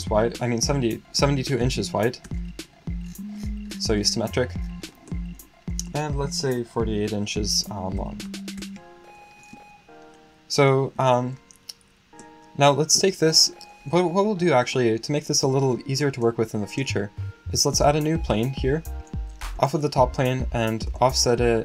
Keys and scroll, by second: 1.4-2.4 typing, 8.0 typing.